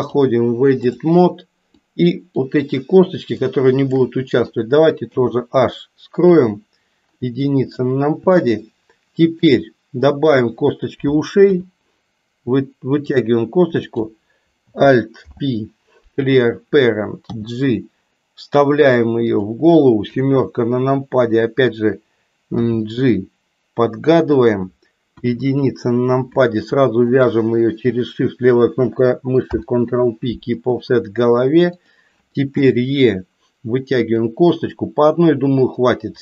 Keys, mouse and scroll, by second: 0.1 click, 1.9 click, 3.4 shift+click, 5.0 h, 6.3 KP_1, 8.3-9.4 middle drag, 10.2 click, 11.4 e, 15.2 alt+p, 17.3 g, 20.1 KP_7, 22.6 g, 25.1 KP_1, 27.1 shift+click, 29.4 ctrl+p, 32.5 e.